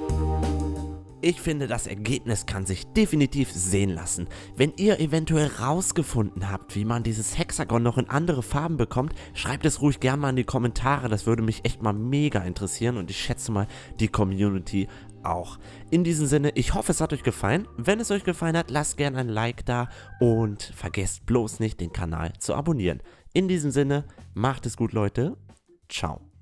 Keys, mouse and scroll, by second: 0.4-26.4 drag.